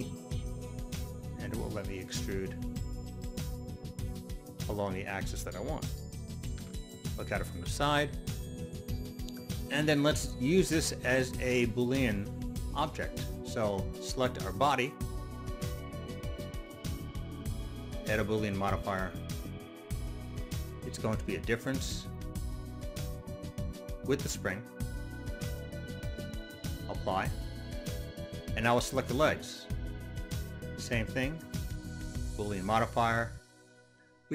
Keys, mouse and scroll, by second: 4.1 click, 6.6 KP_3, 8.6 Return, 8.9-10.8 middle drag, 14.5 right click, 16.6 click, 17.5 click, 18.8 click, 19.8 click, 21.0 click, 22.8 click, 24.7 click, 26.3 click, 29.2 right click, 31.1 click, 32.1 click, 33.2 click.